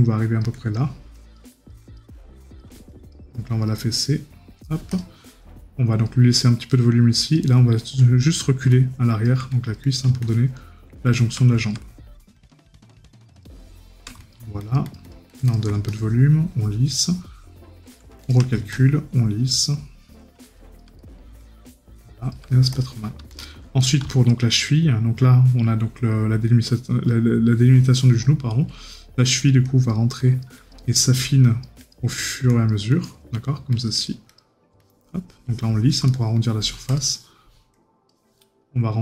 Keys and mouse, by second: 4.0 right click, 21.0 right click, 23.8 right click, 36.1 right click.